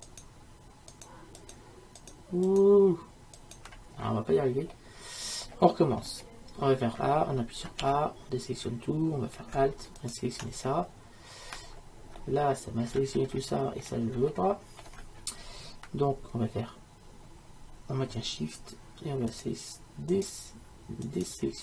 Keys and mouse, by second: 5.0-10.0 middle drag, 7.9 a, 10.0 right click, 10.7 middle click, 11.4 right click, 11.7-19.4 middle drag, 19.4-21.6 right drag.